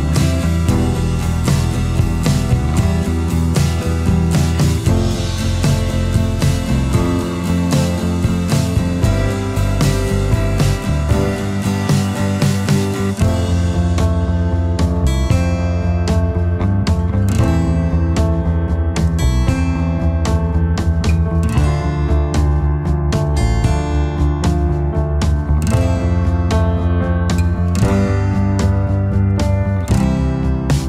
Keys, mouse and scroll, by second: 3.6 space, 5.5 space, 13.0 alt+scroll up 1, 27.1 space.